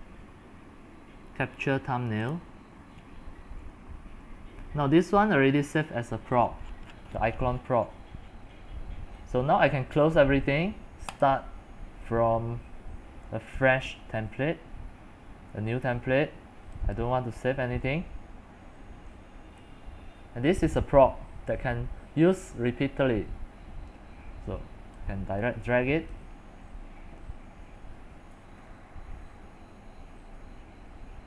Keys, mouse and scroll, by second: 0.0-2.4 right drag, 2.4-6.4 drag, 6.4 middle click, 7.0-11.3 scroll down 45, 11.3-16.3 drag, 17.0-19.5 drag, 19.5 scroll up 8, 19.8-23.3 scroll down 4, 23.3-24.9 scroll down 1, 26.2-31.1 drag.